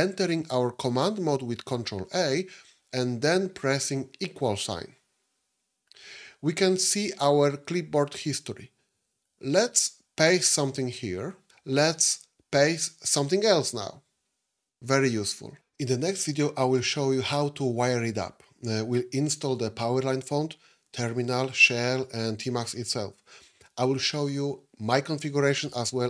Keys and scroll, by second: 2.1 ctrl+a, 4.2 =.